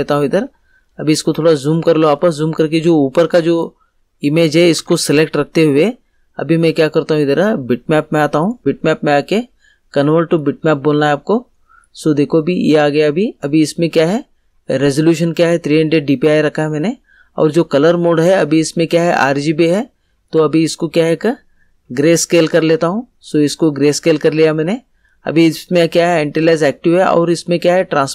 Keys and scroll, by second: 4.7 ctrl+z.